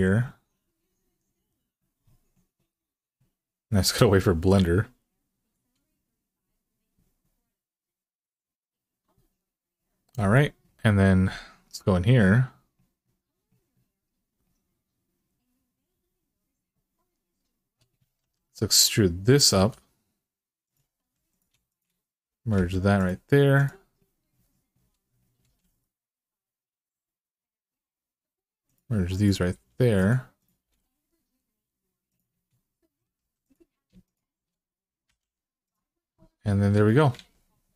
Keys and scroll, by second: 18.0 2, 19.3 e, 20.8 1, 22.3 m, 25.2 g, 29.3 g, 30.4 g, 33.0 2, 34.8 f, 37.0 alt+z.